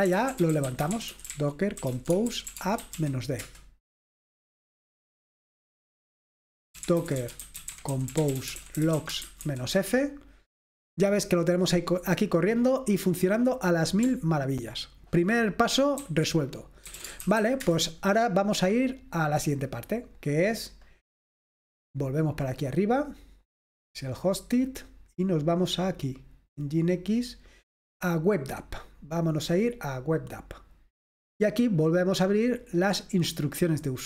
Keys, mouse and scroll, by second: 0.0-3.4 typing, 6.5-9.9 typing, 16.0 ctrl+c, 16.7-17.9 typing, 19.7 click, 20.8 click, 21.2 middle click, 22.8 click, 29.0 click, 32.7-34.0 drag.